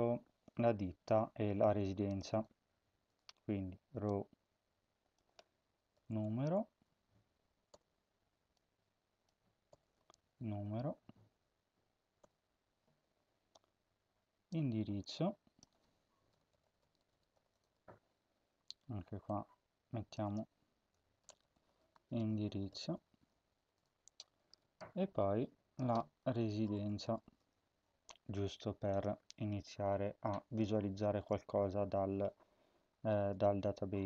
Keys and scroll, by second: 5.5-7.7 typing, 9.5-12.2 typing, 15.9-18.1 typing, 20.2-23.0 typing, 25.9-27.9 typing, 30.0 ctrl+s.